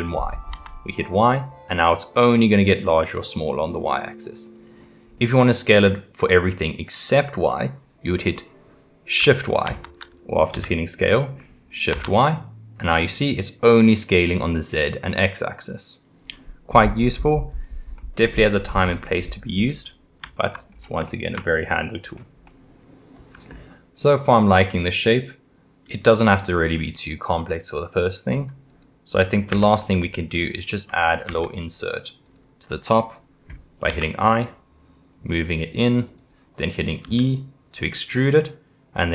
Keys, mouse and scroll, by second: 9.6 shift+y, 10.5 s, 18.0-19.1 middle drag, 19.1 click, 20.2-20.7 shift+middle drag, 20.7-21.1 scroll up 2, 21.1-21.6 shift+middle drag, 21.6-22.0 scroll up 2, 22.0-22.5 scroll down 1, 22.5-27.1 middle drag, 28.7 click, 29.5 Tab, 30.9 Tab, 31.3 Tab, 32.2 click, 33.9 i, 37.0 e.